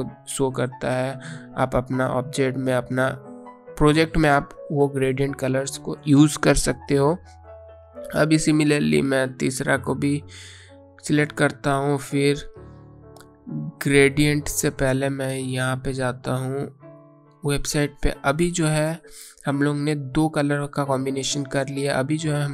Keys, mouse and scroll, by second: 15.2 click, 20.8-21.4 scroll down 1.